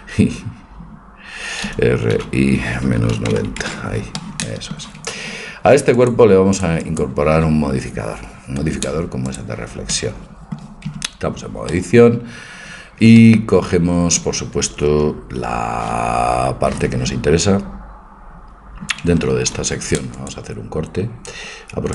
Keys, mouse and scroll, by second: 1.7 r, 4.2 middle click, 6.0-8.7 drag, 10.9 Tab, 19.5 ctrl+r.